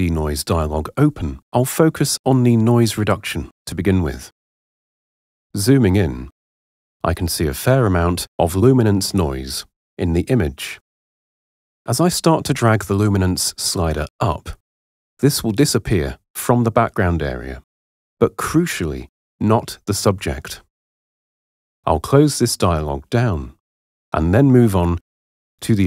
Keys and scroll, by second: 23.8 super+0.